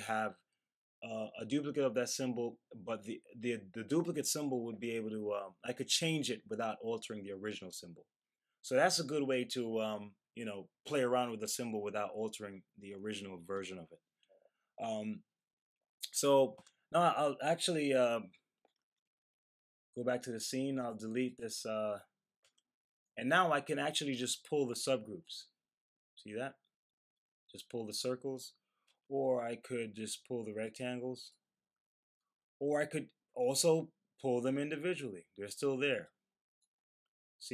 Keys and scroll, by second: 18.7 super+z.